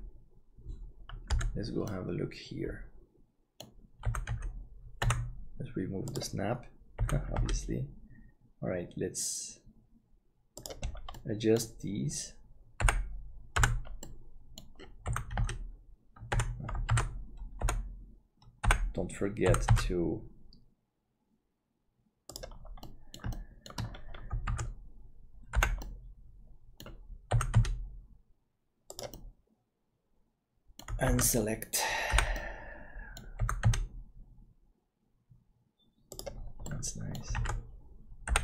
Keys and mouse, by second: 1.3 KP_Decimal, 2.0-5.2 middle drag, 4.0 g, 7.0 g, 11.2 middle click, 12.8 l, 13.5 KP_Decimal, 14.1 middle click, 15.1 g, 16.9 alt+a, 17.6 l, 18.6 l, 19.5 g, 23.0 middle click, 23.5 shift+middle click, 24.5 alt+a, 25.5 l, 25.8-29.0 middle drag, 27.3 g, 29.2-30.8 middle drag, 31.1 alt+a, 32.1 l, 32.5 middle click, 33.4 g, 36.7 middle click, 37.3 alt+a, 38.3 l.